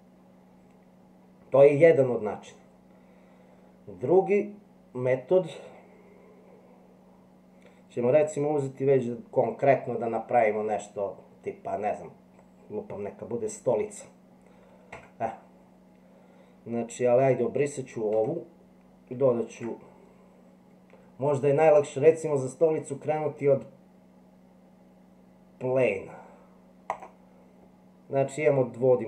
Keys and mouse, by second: 14.9 Tab, 19.5 shift+a.